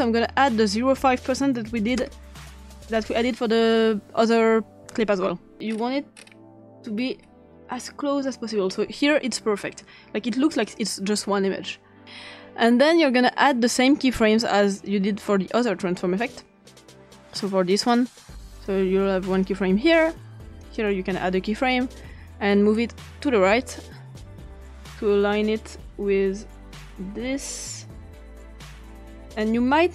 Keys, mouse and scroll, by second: 0.0 click, 1.3 5, 2.0 Return, 5.7-6.7 scroll up 3, 6.9-7.2 scroll down 2, 7.9-9.0 scroll down 1, 10.7 click, 13.5 click, 14.7 click, 17.0 click, 18.5 click, 19.3 click, 20.6 click, 23.6-29.9 drag.